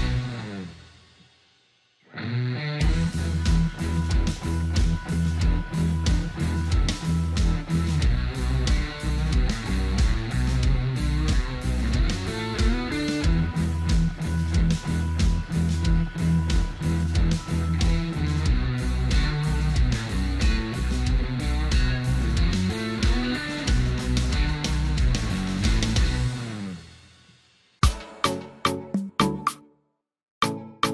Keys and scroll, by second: 2.7 Delete, 7.2 ctrl+space, 24.5 ctrl+alt+space.